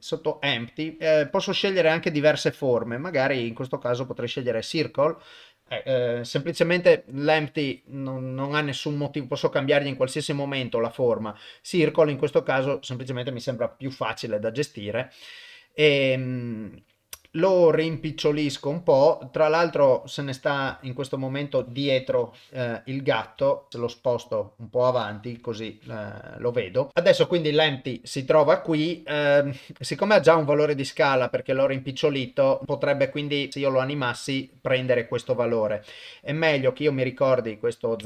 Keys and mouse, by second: 9.1-9.9 drag, 10.7-12.6 drag, 17.2 s, 19.8 middle click, 20.8 ctrl+middle click, 22.1 KP_0, 22.7 middle click, 23.4 shift+middle click, 23.9 g, 25.4 KP_0, 26.9 ctrl+z.